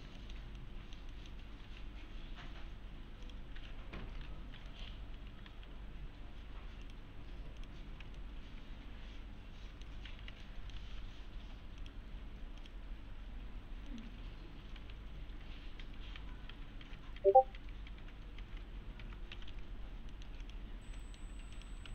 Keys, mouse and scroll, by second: 0.2 scroll up 1, 0.2 middle click, 0.6-1.4 alt+middle click, 1.4 middle click, 1.7 1, 2.6-3.3 scroll up 1, 3.3 click, 4.4 scroll down 1, 4.6 scroll up 1, 4.7 middle click, 4.9-6.0 typing, 6.8 click, 7.9 scroll down 1, 8.2-10.1 alt+middle click, 10.1 1, 10.4 alt+middle click, 10.8 1, 11.8 click, 13.5-13.9 scroll down 1, 13.9 middle click, 14.1-14.7 scroll down 1, 14.8 alt+`, 19.1-20.0 typing, 19.7-20.1 scroll down 1, 20.1 middle click, 20.4 click, 21.0 alt+middle click, 21.6 click.